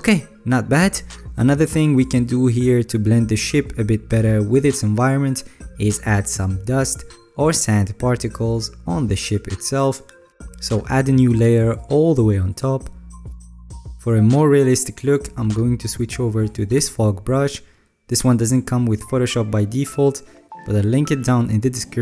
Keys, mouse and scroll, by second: 16.1 drag, 17.3 click, 18.8 alt+right click, 19.7 alt+right click.